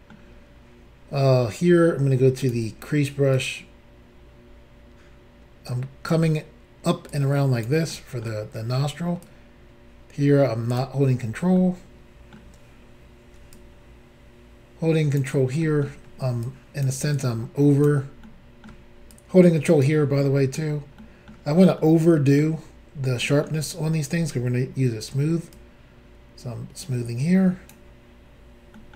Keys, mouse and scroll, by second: 2.4 click, 2.5 click, 3.4 click, 7.1 click, 7.9 middle click, 9.3 click, 11.2-11.6 scroll down 2, 11.6 middle click, 13.5 ctrl+click, 15.6 middle click, 16.4 ctrl+click, 17.2 ctrl+click, 18.2 middle click, 19.1 ctrl+click, 20.2 middle click, 21.0 middle click, 23.2 middle click, 23.4 scroll down 1, 24.3-24.8 scroll up 3, 25.5 ctrl+click, 28.7 ctrl+middle click.